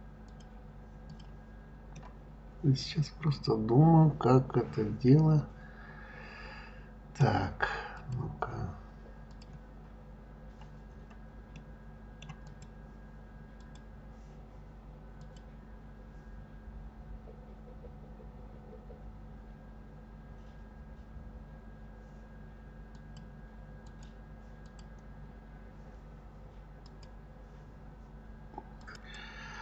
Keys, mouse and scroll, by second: 0.3 click, 1.0 click, 1.9-4.9 middle drag, 7.9 click, 9.3 click, 9.8-10.9 scroll down 1, 10.9-11.4 scroll up 3, 11.6 middle click, 12.4 click, 13.6 click, 15.1 click, 22.9 click, 23.8 click, 24.6 click.